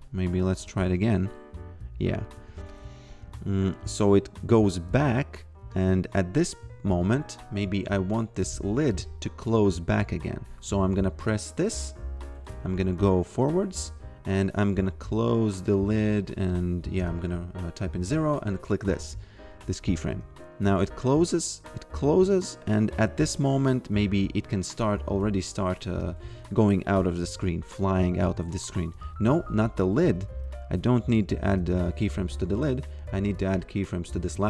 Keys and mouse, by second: 1.0 click, 2.4 f, 2.7 click, 3.2 f, 4.0 click, 7.9 click, 12.3 f, 14.6 click, 16.3 click, 17.0 0, 18.1 click, 20.1 f, 21.4 click, 25.5 click, 27.8 click, 29.6 ctrl+z, 33.3 click.